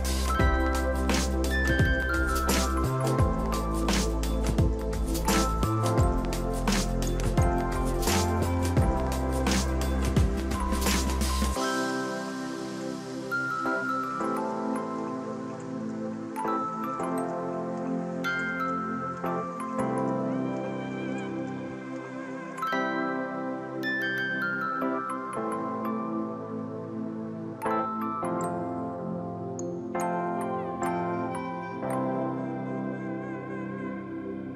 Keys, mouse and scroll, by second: 1.1 ctrl+t, 2.2-3.0 scroll down 4, 5.3 shift+click, 6.8 ctrl+a, 8.0 ctrl+d, 8.4 ctrl+t, 8.8 alt+click, 10.9-11.8 scroll down 1, 11.8 scroll down 1, 12.2 ctrl+j, 13.0 right click, 13.8 double click, 15.8 ctrl+t, 20.3-20.7 scroll down 2, 20.9 scroll down 1, 21.7 shift+click, 23.2 ctrl+a, 24.7 ctrl+d, 25.9 ctrl+j, 26.5 right click, 27.7 double click, 29.6 ctrl+t.